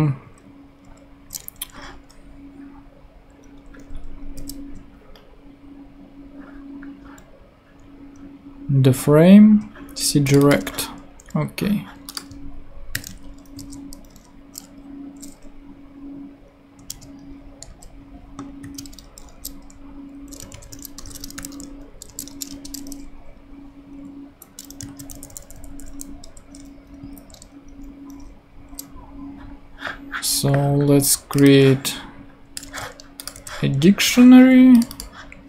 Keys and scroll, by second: 4.4 super+/, 10.6 super+c, 12.9 super+/, 13.6 super+v, 16.9 space, 17.7 BackSpace, 18.6 Right, 18.8 space, 20.2-22.3 typing, 22.5 shift+Return, 23.4 Return, 24.5 Up, 25.1 Left, 26.2 BackSpace, 27.0 Down, 32.6 super+c, 33.3 super+v.